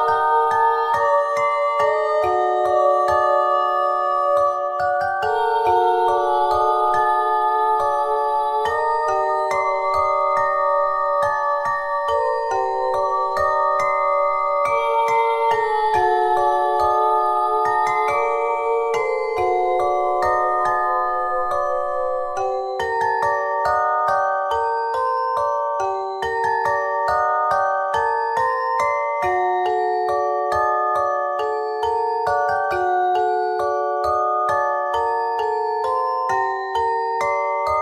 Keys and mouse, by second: 1.2 ctrl+z, 1.8 a, 2.0 a, 2.6 shift+d, 7.7 middle click, 11.3 w, 12.4 middle click, 13.1 click, 14.4-15.9 drag, 14.4 w, 15.9 middle click, 16.2 a, 16.5 a, 16.7 middle click, 17.3 ctrl+n, 17.9 KP_3, 18.5 middle click, 19.5 z, 21.8 KP_3, 23.7 s, 25.9 s, 27.5 KP_1, 28.2 z, 28.4 Tab, 29.6 KP_1, 30.4 Tab, 32.5 e, 34.2 s, 35.5 KP_1, 36.2 z.